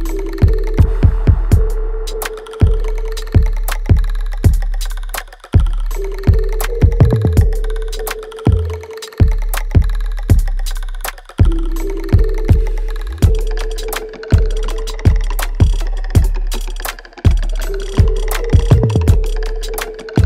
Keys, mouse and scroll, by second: 1.1 ctrl+s, 1.7 alt+click, 2.1 alt+middle click, 2.6-5.2 alt+drag, 7.1 alt+click, 7.8 alt+right click, 8.4 click, 8.8 right click, 9.5 alt+click, 11.0 shift+click, 13.0 alt+click, 14.7 alt+click, 15.0 alt+middle click, 15.5 alt+right click, 16.3 shift+click, 17.5 alt+click, 17.9 alt+middle click, 19.1 shift+click.